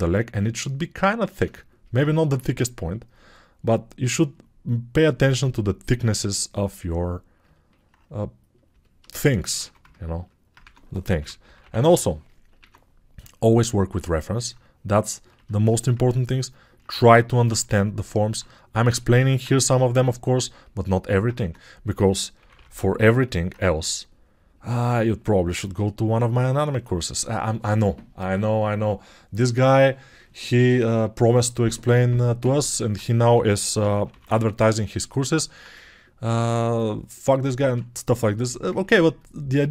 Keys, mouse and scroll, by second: 9.8 alt+2, 10.6 2, 11.2 p, 12.6 i, 22.5 [.